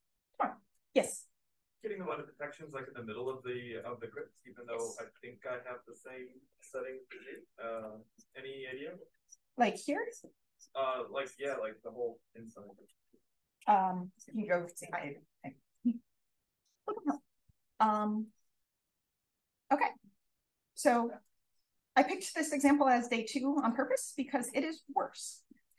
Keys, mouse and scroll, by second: 8.0-8.9 drag, 9.6-13.0 scroll up 2, 15.3 click, 19.0 click, 19.9-22.2 typing, 20.1-20.6 scroll up 1, 20.8 click, 21.2 scroll up 1, 23.2 click, 23.4 click, 23.7 d, 24.1 d, 24.4 d, 25.7 click.